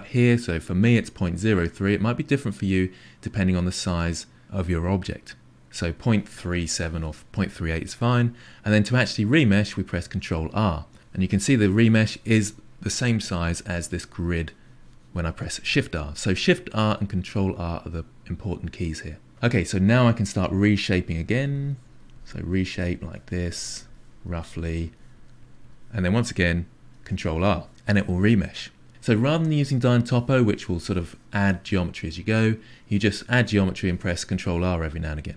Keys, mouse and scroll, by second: 10.0 ctrl+r, 13.6 shift+r, 19.8-21.0 drag, 21.2 click, 22.1 click, 22.9 click, 23.2-24.2 drag, 24.3 click, 25.4-27.0 drag, 27.0 ctrl+r.